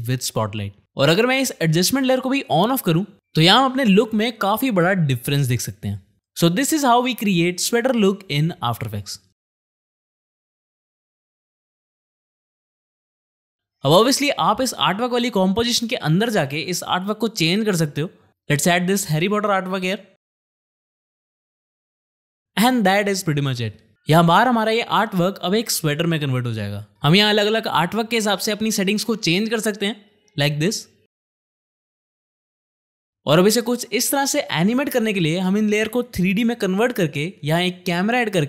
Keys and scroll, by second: 7.7 space, 7.9 Home, 8.2 space, 30.7 2, 30.8 Return, 32.4 space.